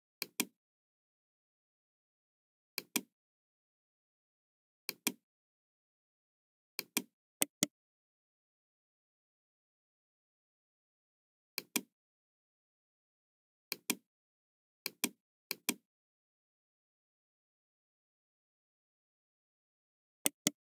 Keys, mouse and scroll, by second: 0.1 click, 1.3-1.6 scroll down 1, 2.8 click, 4.8 click, 6.7 click, 7.4 right click, 11.5 click, 13.7 click, 14.8 click, 15.4 click, 18.0 middle click, 20.2 right click.